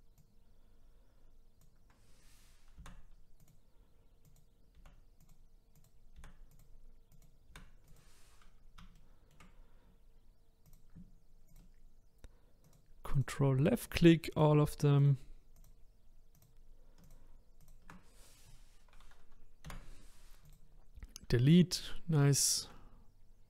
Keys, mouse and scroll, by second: 0.2 click, 2.8 Delete, 4.2 click, 4.7 Delete, 5.8 click, 6.2 Delete, 7.1 click, 7.5 Delete, 8.5-9.0 scroll up 4, 9.0-10.6 shift+middle drag, 10.6 click, 12.6 ctrl+click, 13.1 ctrl+click, 13.9 ctrl+click, 14.3 ctrl+click, 15.0 ctrl+click, 15.6 ctrl+click, 16.4 ctrl+click, 17.0 ctrl+click, 17.6 ctrl+click, 19.7 Delete, 21.1-21.7 scroll down 1, 21.7 click, 22.4-23.4 shift+middle drag.